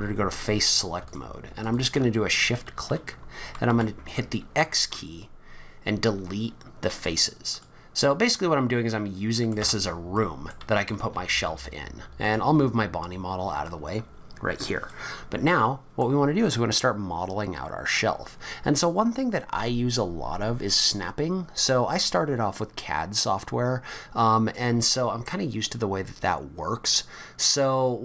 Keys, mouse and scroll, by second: 0.3 click, 1.1 shift+click, 1.6 click, 3.7 x, 8.3 scroll up 4, 8.9 middle click, 9.6 Tab, 10.1 middle click, 10.7 click, 11.1 g, 14.9 middle click.